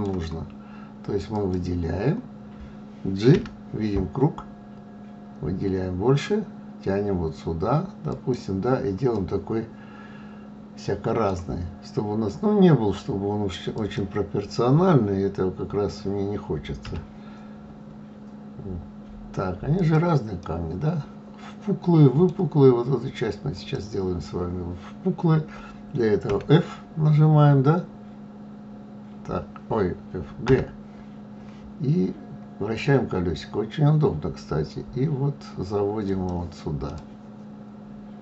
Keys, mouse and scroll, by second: 1.3 click, 3.3 g, 9.1-12.1 middle drag, 13.7 click, 16.8 g, 20.4-23.4 middle drag, 23.5 click, 26.3 f, 28.1-28.5 scroll down 2, 28.7-30.5 scroll up 2, 30.5 g, 36.9-38.2 middle drag.